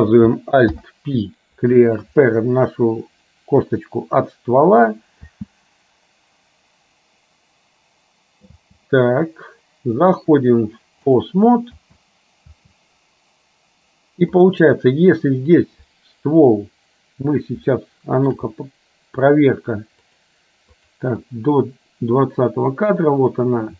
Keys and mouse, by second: 0.8 alt+p, 5.3 space, 8.6 space, 10.1-11.3 drag, 11.8 space, 17.8 shift+middle click, 20.1 click, 21.3-23.7 drag.